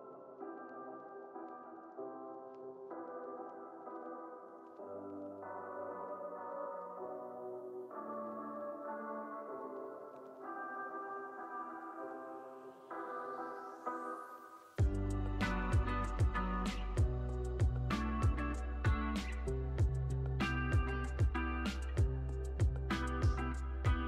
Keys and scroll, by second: 11.5 super+=.